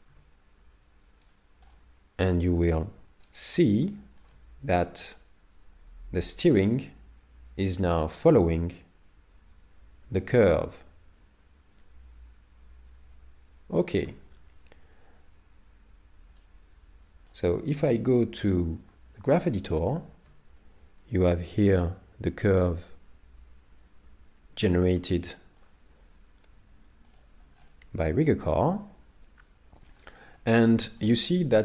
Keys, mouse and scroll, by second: 0.1 z, 1.3 middle click, 2.4 KP_7, 3.2-3.9 scroll down 5, 3.9 shift+middle click, 5.2 click, 16.4 click, 19.4 click, 24.0 Home, 25.0 middle click, 27.1 click, 27.6-28.1 scroll up 5, 28.1 middle click, 29.8-30.2 scroll up 2, 30.5 middle click.